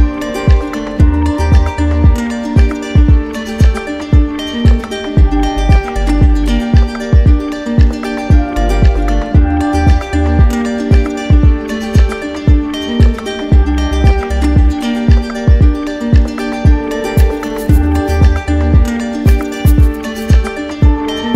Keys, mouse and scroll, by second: 0.5 click, 1.1 click, 1.9 click, 3.3 click, 4.3 alt+click, 5.8 click, 6.5 alt+click, 9.4-10.5 drag, 10.8-11.9 drag, 13.7-14.8 drag, 15.2-16.4 drag, 17.0-19.0 right drag, 19.0 click, 20.3 ctrl+z.